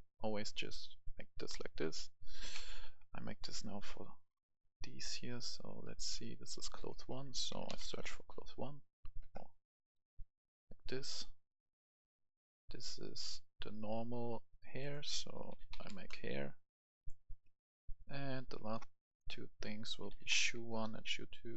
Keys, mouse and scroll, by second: 1.2 scroll down 1, 1.5 right click, 2.5 ctrl+v, 3.4-4.6 drag, 5.8 right click, 6.7 click, 7.3-8.1 typing, 9.2 BackSpace, 10.3-19.0 drag, 15.5-15.8 typing, 19.8-21.5 typing.